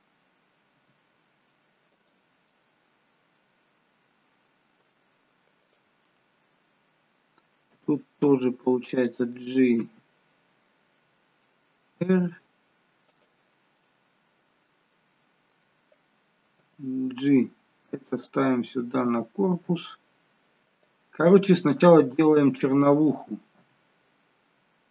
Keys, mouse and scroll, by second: 0.7 r, 2.4 middle click, 5.6 click, 7.7 g, 9.7 r, 13.7 middle click, 16.6 g, 18.9 r, 21.2 middle click, 23.6 g.